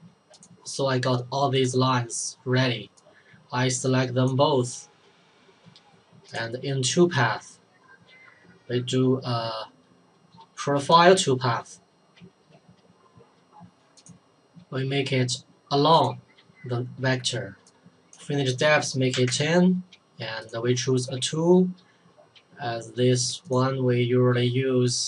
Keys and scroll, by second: 18.9-19.8 typing.